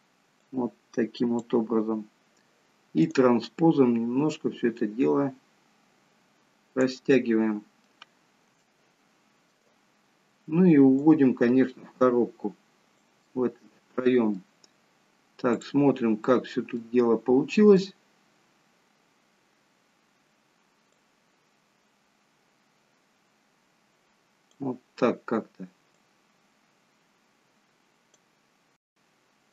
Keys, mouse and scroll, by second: 0.5 click, 3.2 click, 7.2 middle click, 8.2-8.6 scroll down 1, 8.8 shift+middle click, 11.0 click, 13.4 middle click, 15.8 click, 16.5-16.9 scroll down 2, 16.9 middle click, 18.9-19.5 scroll up 3, 21.0 click, 26.0 click.